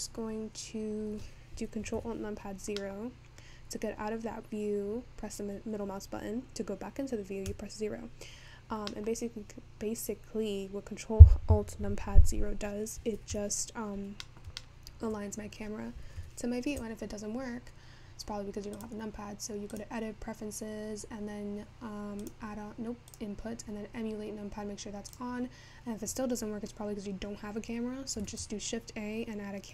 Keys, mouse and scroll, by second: 2.7 alt+KP_0, 3.8-5.2 scroll up 2, 5.2 scroll up 1, 13.5 alt+KP_0, 16.0-18.2 shift+middle drag, 18.2-19.0 scroll up 10, 19.0-24.9 drag, 28.3 shift+a.